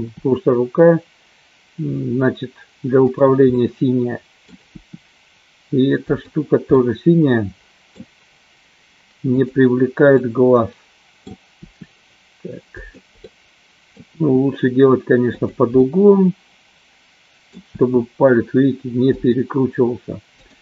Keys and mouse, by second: 0.2 r, 3.4-4.4 middle drag, 4.9 r, 6.7-8.0 middle drag, 9.3 click, 10.3-11.3 middle drag, 13.2 middle click, 14.1 r, 15.8-17.4 middle drag, 17.9 r, 20.4 click.